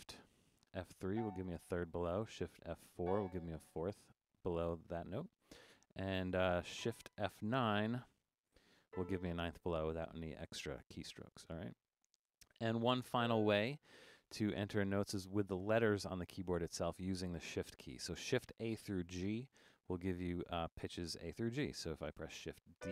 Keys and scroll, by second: 1.1 shift+F3, 3.1 shift+F4, 8.9 shift+F9, 22.8 shift+d.